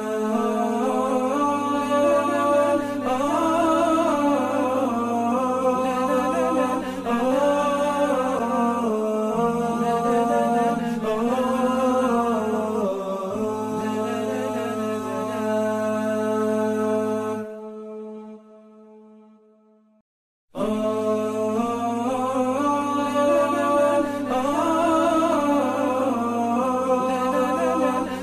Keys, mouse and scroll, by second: 10.3-11.0 alt+scroll up 5, 11.3 alt+scroll down 1, 11.6-12.0 alt+scroll up 1, 12.0 alt+scroll down 1, 18.8-19.3 alt+scroll down 6, 21.1 alt+scroll down 6, 21.8 alt+scroll up 1, 28.1 ctrl+z.